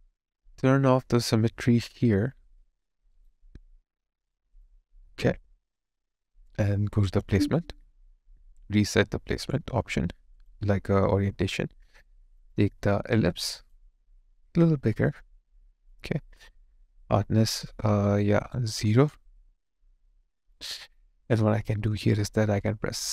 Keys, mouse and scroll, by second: 3.1 right click, 18.1 alt+right click, 18.7 alt+click, 19.4 alt+middle click, 19.9 alt+click.